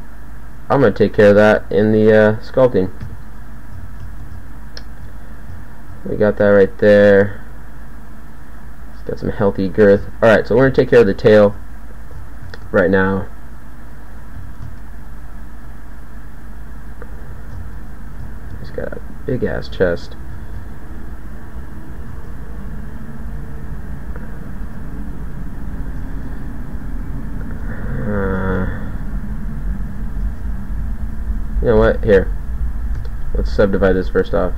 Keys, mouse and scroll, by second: 3.0 KP_1, 3.7 z, 10.0 KP_1, 12.8 Tab, 14.0 Tab, 14.3 z, 15.6 g, 20.4 ctrl+a, 22.2 ctrl+a, 24.6 ctrl+a, 28.4 ctrl+a, 30.2 ctrl+a, 33.0 w.